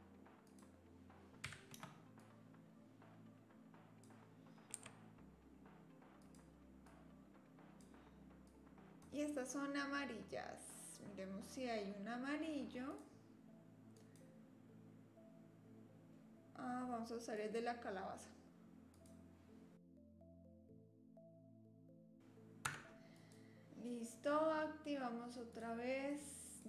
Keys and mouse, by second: 0.4-2.1 drag, 2.3-4.0 drag, 4.7 s, 6.8-7.9 drag, 8.5 click, 14.0-17.6 drag, 19.0-20.1 drag, 20.2 shift+d, 21.3 click, 21.5 click, 22.0 click, 22.7 Tab, 25.5 click, 26.1-26.6 drag.